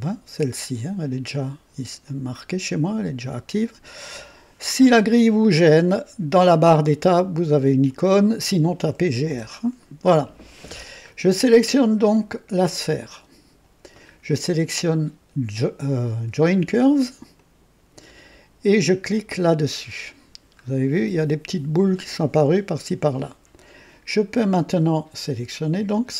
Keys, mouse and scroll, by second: 2.0 click, 4.8-6.0 drag, 7.3 click, 7.9 click, 8.9-9.7 typing, 13.1-13.7 drag, 17.3 ctrl+click, 19.4 click, 20.5-20.9 scroll up 1, 21.2 right click, 25.2 click.